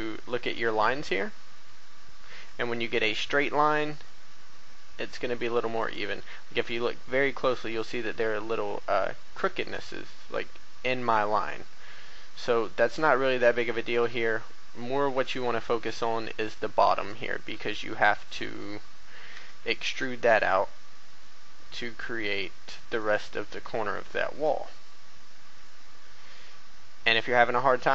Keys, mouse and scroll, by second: 0.2 shift+middle click, 1.0 scroll up 1, 3.0 shift+g, 5.7 click, 14.7-16.2 scroll down 1, 16.5-17.7 drag, 17.7 g, 18.3 right click, 19.3 e.